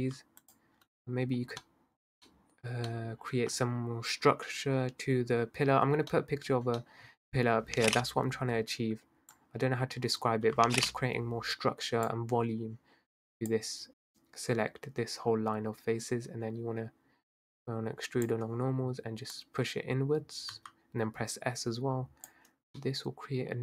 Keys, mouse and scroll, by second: 0.5 alt+shift+click, 1.4-2.0 scroll down 1, 2.0-2.7 scroll up 2, 2.7-3.3 scroll down 1, 3.3-5.9 scroll up 2, 6.6 scroll up 2, 6.8 middle click, 7.5-8.3 scroll down 2, 8.3-9.3 middle drag, 9.3 click, 13.1 click, 17.4-19.6 drag, 22.8 middle click.